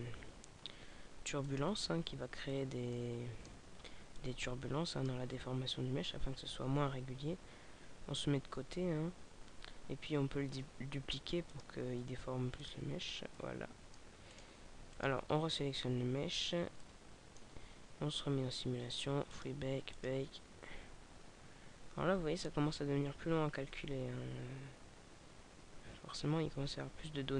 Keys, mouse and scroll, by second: 2.9 middle click, 4.1 click, 5.6 KP_0, 7.2 KP_3, 11.5 click, 11.8 shift+d, 12.6 click, 13.3 middle click, 14.3 right click, 16.1 KP_5, 16.8 middle click, 19.3 click.